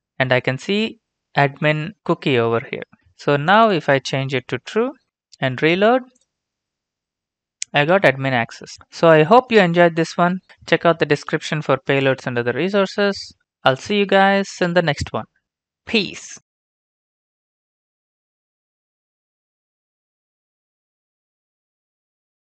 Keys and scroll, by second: 4.2-5.4 typing.